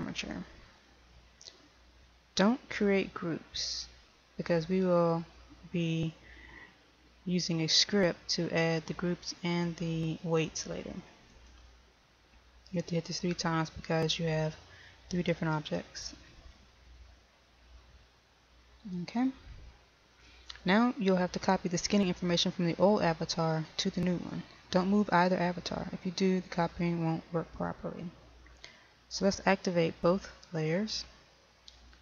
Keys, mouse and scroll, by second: 0.6-14.7 drag.